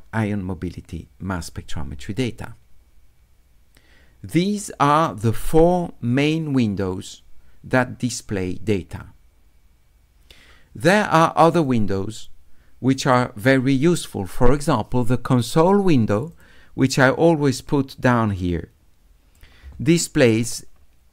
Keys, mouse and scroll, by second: 11.6 click, 16.3 click, 18.1-19.4 drag, 20.6 middle click, 20.6-20.9 scroll up 2.